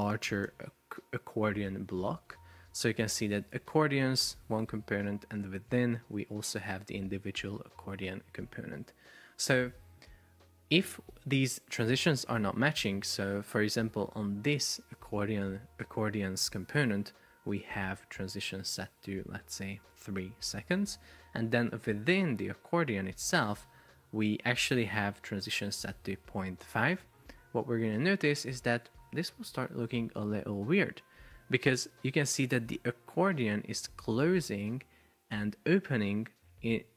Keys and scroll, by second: 0.3 Escape, 2.4 Escape, 3.6 shift+super+4, 4.3 Escape, 20.0 Return, 29.6 super+p.